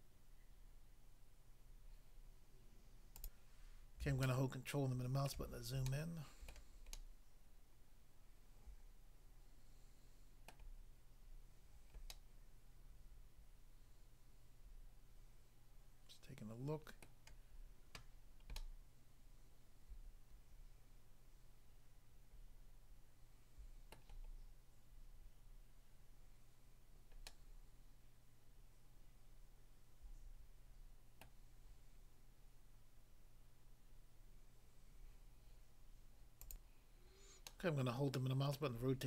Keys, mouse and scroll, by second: 3.2 click, 3.3 click, 4.3 ctrl+middle click, 5.9 shift+middle click, 6.5 shift+middle click, 6.9 shift+middle click, 10.5 middle click, 11.3-11.7 scroll up 1, 12.1 middle click, 17.1 middle click, 18.5 middle click, 23.9 middle click, 24.4-25.3 scroll down 1, 27.3 middle click, 31.2 middle click, 36.5 click, 36.6 click, 37.5 middle click, 38.6 middle click.